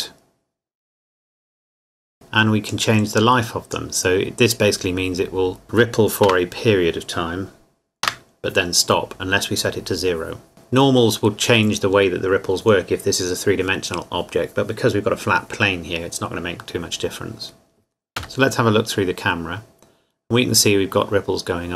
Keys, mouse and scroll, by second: 2.7 click, 3.4 click, 6.3 KP_0, 8.1 KP_Enter, 18.2 KP_0.